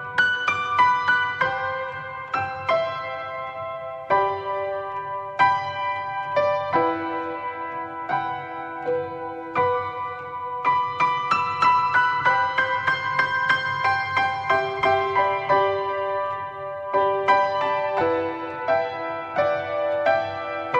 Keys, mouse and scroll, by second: 5.0-11.0 drag, 11.6-18.7 middle drag, 18.7 click, 20.1 click.